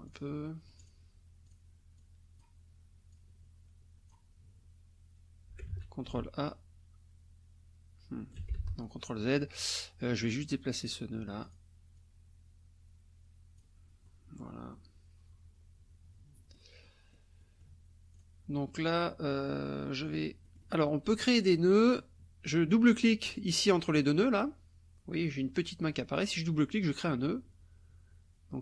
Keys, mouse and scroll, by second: 0.4 click, 1.4 click, 2.0 click, 3.1-4.3 drag, 5.7 ctrl+a, 6.1-8.5 ctrl+alt+drag, 8.6 ctrl+alt+z, 10.2 click, 10.8 click, 11.4 click, 11.9-13.8 drag, 14.0 click, 14.7-16.7 drag, 16.8 click, 17.4 click, 18.1 click, 20.4 click, 26.1 click, 26.8-28.6 drag.